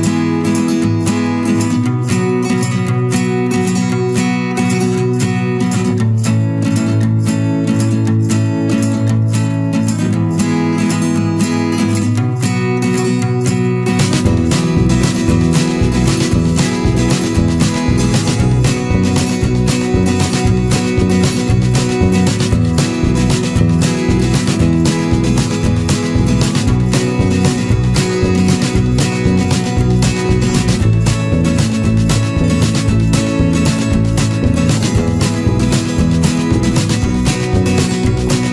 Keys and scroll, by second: 1.2 ctrl+=, 8.9 Return, 15.0 ctrl+z, 20.8 ctrl+-, 34.2 ctrl+-, 34.6 ctrl+0, 37.0 ctrl+z.